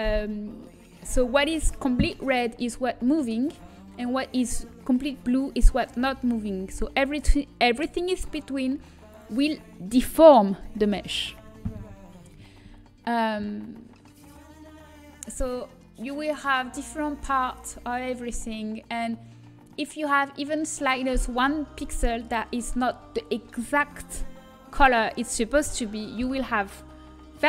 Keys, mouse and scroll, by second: 14.6-20.4 drag, 20.4-21.8 middle drag.